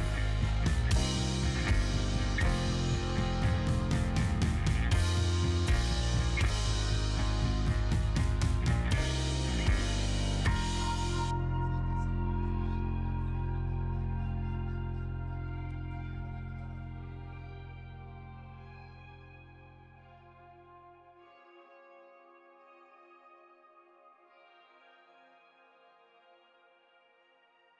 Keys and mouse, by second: 0.6 KP_Divide, 2.1-3.4 middle drag, 3.7 KP_Divide, 4.7 KP_Divide, 5.2-6.4 middle drag, 6.8-7.2 middle drag, 7.6 KP_Divide, 8.1 click, 8.3-9.0 middle drag, 9.1 middle drag, 9.6 middle drag, 9.9-10.5 middle drag, 11.6 g, 12.9 click, 13.1 click, 13.8 g, 14.2 click, 14.6 middle click, 15.3 e, 17.5 g, 18.7 right click, 19.0 ctrl+z, 19.5 g, 21.6-22.4 middle drag, 23.3 click, 24.0 shift+middle drag, 24.4 click, 24.7 click, 25.0 shift+click, 26.3 z, 27.1 click.